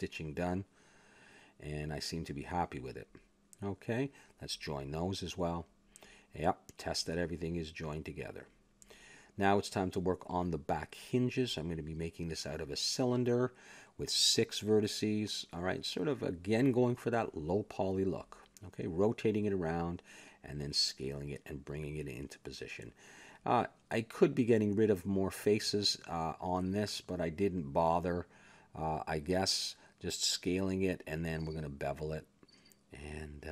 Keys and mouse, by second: 0.0-1.0 middle drag, 1.0 click, 1.6 ctrl+j, 2.1 middle click, 2.4 click, 2.9 ctrl+j, 3.3 middle click, 4.6 click, 5.5 ctrl+j, 6.8 click, 8.0 ctrl+z, 8.0 middle click, 9.6-13.5 middle drag, 13.5 shift+a, 14.9 click, 16.2 middle click, 16.7 r, 18.2 r, 19.7-21.4 drag, 21.0 Tab, 21.7 s, 22.8 click, 24.0 click, 24.7 KP_Decimal, 25.2 middle click, 26.2 click, 27.1 middle click, 27.9 click, 29.7 a, 29.8 a, 30.4 click, 31.3 s, 32.0 click, 32.9 KP_3.